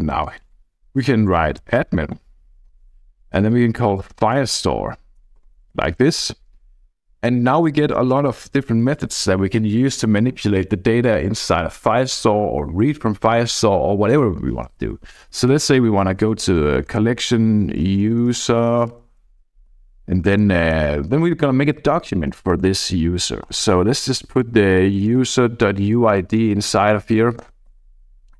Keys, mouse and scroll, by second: 1.2-6.2 typing, 7.8 Down, 7.9 Down, 8.1 Down, 8.3 Down, 8.5 Down, 8.6 Down, 8.8 Down, 9.2 Down, 15.3 c, 16.3-19.7 typing, 16.9 Return, 21.8-22.7 typing, 23.4 Return, 24.0 Left, 24.5-26.4 typing, 26.4 Right, 27.5 Return, 27.7-28.3 typing.